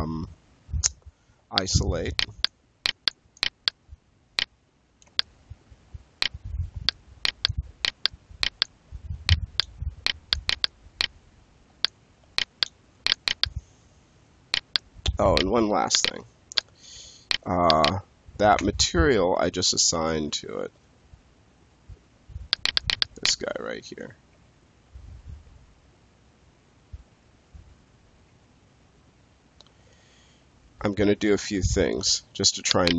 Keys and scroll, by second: 4.9 space, 18.6 space, 20.3 space, 24.2 space, 28.2 space.